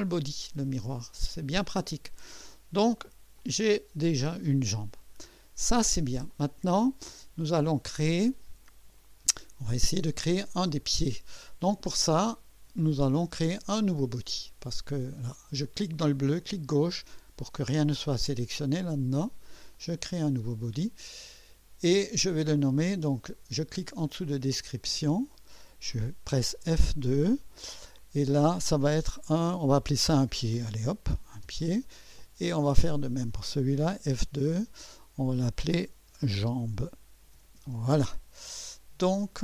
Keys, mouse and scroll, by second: 0.9-3.2 drag, 3.4 click, 5.2 scroll up 1, 5.7 scroll down 1, 6.3-7.7 drag, 16.4 click, 19.7 click, 24.6 click, 26.6 F2, 29.6-31.4 typing, 31.4 Return, 32.8 click, 34.1 F2, 36.0-38.6 typing.